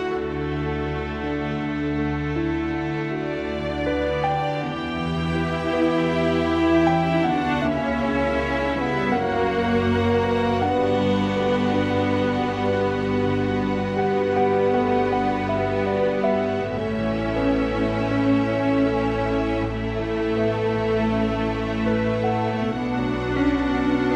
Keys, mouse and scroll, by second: 0.1 click, 0.6 g, 2.1 shift+click, 3.3 shift+click, 3.7 right click, 4.8 1, 5.2-5.7 drag, 6.8 g, 8.6 click, 8.7 g, 11.2 3, 11.9 shift+click, 12.2 shift+click, 12.9 shift+click, 13.7 click, 14.6 e, 16.1 s, 17.9 g, 21.9 s.